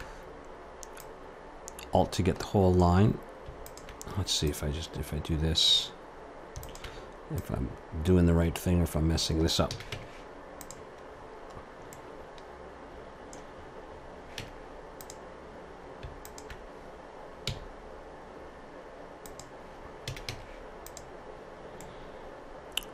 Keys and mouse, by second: 6.6-9.7 drag, 9.7 a, 9.9 Tab, 11.4 middle click, 14.4 Tab, 16.2-18.1 drag, 17.5 s, 20.0 a, 20.3 Tab, 21.4 middle click.